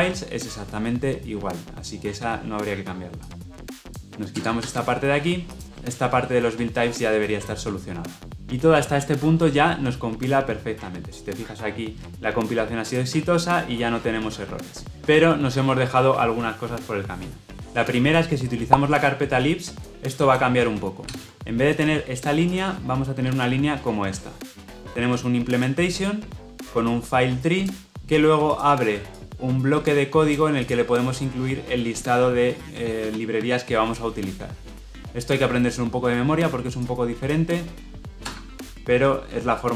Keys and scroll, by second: 25.3 ctrl+v.